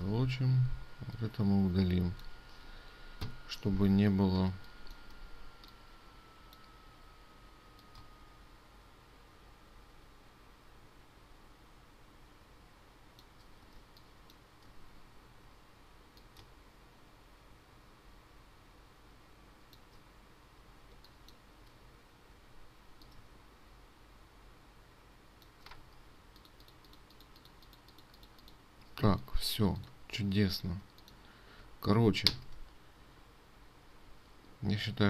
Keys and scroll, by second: 0.4 ctrl+2, 14.4 ctrl+space, 21.6 ctrl+space, 26.4 ctrl+space, 32.9 ctrl+s.